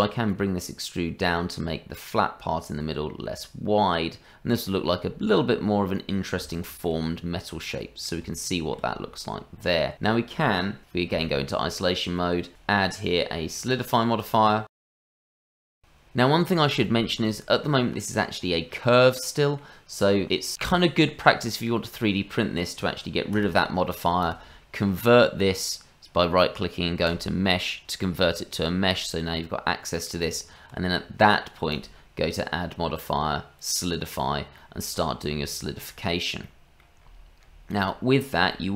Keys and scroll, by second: 11.0 KP_Divide, 15.4 KP_Divide, 28.2 Tab, 30.2 Tab.